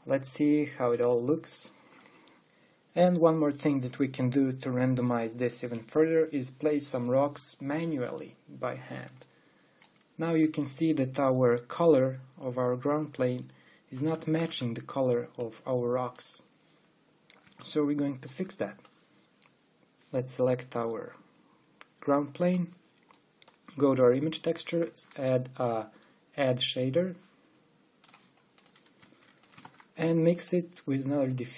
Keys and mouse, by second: 1.8-8.9 drag, 10.1 click, 10.4 click, 10.9-13.2 drag, 15.0 ctrl+b, 25.6 shift+a, 30.2 shift+d.